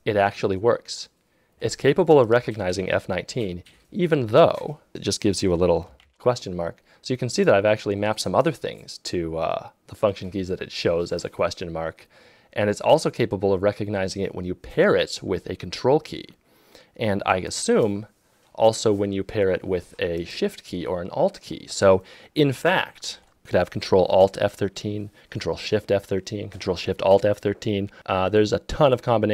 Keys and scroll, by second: 5.1 shift+/.